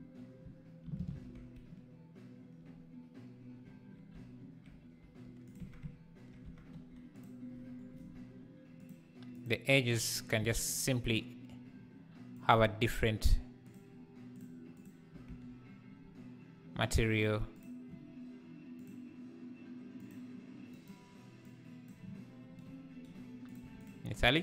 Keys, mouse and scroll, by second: 0.8 shift+n, 5.0 e, 5.6 Tab, 6.4 Tab, 6.7 3, 7.2 click, 8.9 click, 9.4 click, 10.4 ctrl+l, 13.7 click, 15.3 Tab, 23.8 click.